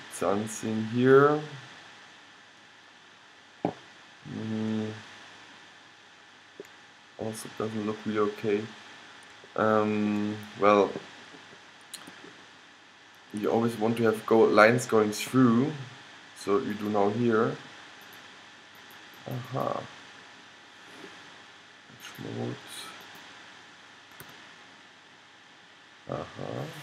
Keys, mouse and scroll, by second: 1.6-3.8 middle drag, 4.7 middle click, 7.1 middle click, 7.3-9.0 middle drag, 12.9 middle click, 14.4-15.9 middle drag, 16.8-21.4 drag, 24.4 g.